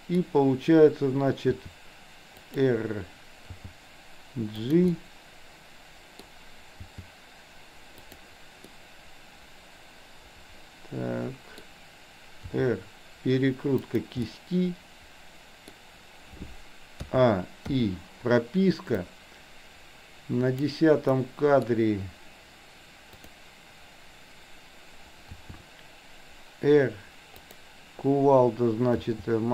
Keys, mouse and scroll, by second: 1.6 r, 3.6 g, 5.0-6.4 middle drag, 6.9 g, 8.7-11.6 middle drag, 12.6 r, 14.4-15.7 middle drag, 17.1 a, 17.7 i, 19.1-20.9 drag, 21.1 middle click, 23.2 click, 25.5 r, 29.0 g.